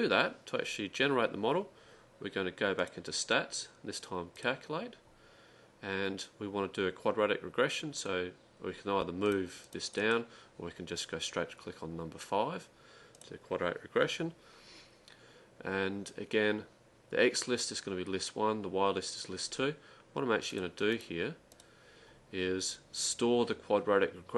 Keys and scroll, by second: 9.8-10.6 typing.